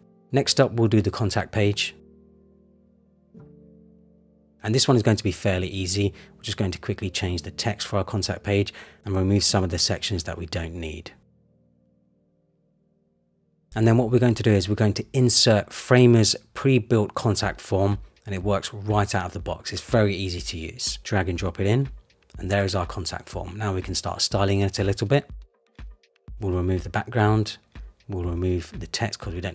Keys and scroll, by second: 5.3 Return, 10.5 super+c, 10.6 super+v, 10.9 Right.